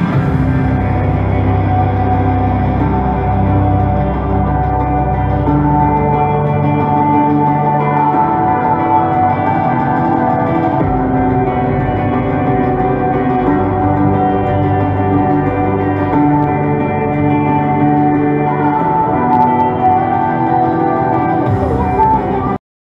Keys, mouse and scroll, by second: 0.9 right click, 1.9 click, 6.7 click, 12.2 right click, 13.4 right click, 16.3 click, 22.6 right click.